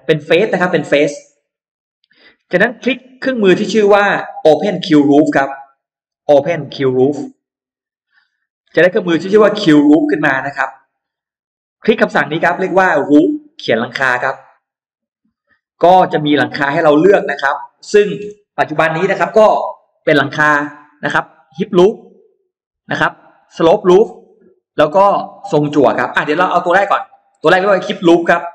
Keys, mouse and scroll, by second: 0.0 click, 0.3 scroll down 1, 0.7 middle click, 1.1 scroll up 1, 7.4 click, 8.5 click, 11.0 click, 14.7 click, 16.0-17.3 drag.